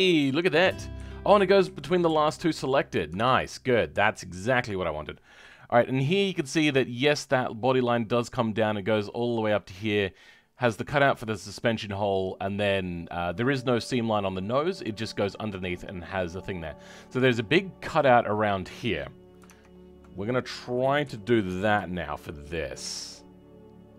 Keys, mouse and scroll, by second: 0.0-2.0 shift+z, 21.8 shift+middle click, 22.7 Tab, 23.1-23.9 scroll up 2.